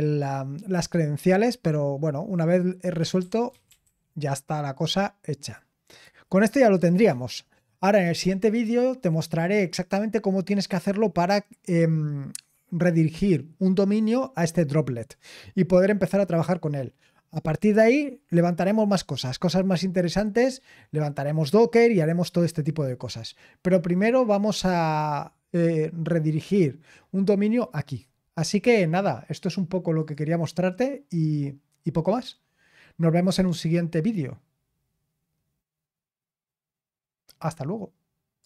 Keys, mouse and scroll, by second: 2.9-4.3 typing, 5.9 Return, 29.9 click, 38.4 click.